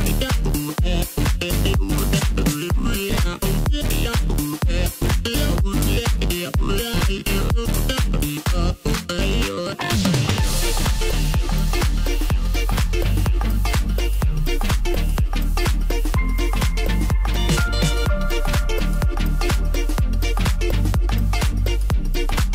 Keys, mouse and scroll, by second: 0.7-1.1 scroll up 1, 1.7 2, 2.6 click, 3.5 shift+click, 4.0-5.7 middle drag, 5.7 shift+click, 7.2 shift+click, 8.2 KP_1, 9.5 g, 11.4 scroll down 1, 11.6-13.0 middle drag, 13.0-13.8 scroll up 1, 13.8 2, 14.5 click, 15.1-15.8 scroll down 2, 15.8 KP_1, 17.5 e, 22.1 scroll down 1.